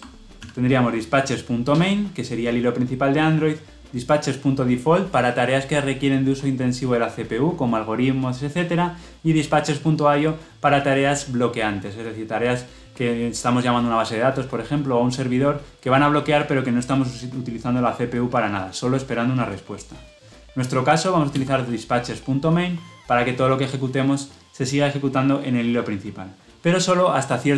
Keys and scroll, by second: 21.2 Return.